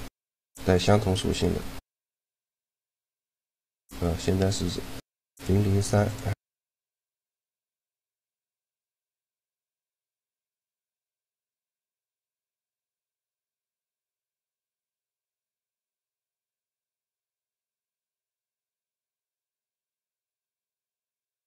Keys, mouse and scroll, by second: 1.9 middle click, 2.5 a, 2.9 shift+g, 4.8-6.6 drag, 7.5-9.3 right drag, 8.5-10.5 drag, 14.0-15.7 drag, 15.7 shift+g, 18.9 shift+g, 20.9-21.4 drag.